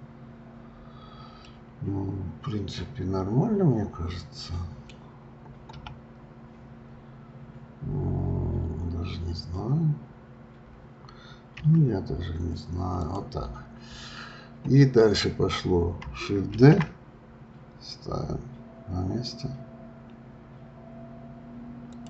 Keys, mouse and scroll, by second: 0.2-1.4 scroll up 2, 1.4-4.6 middle drag, 5.7 KP_7, 16.5 shift+d.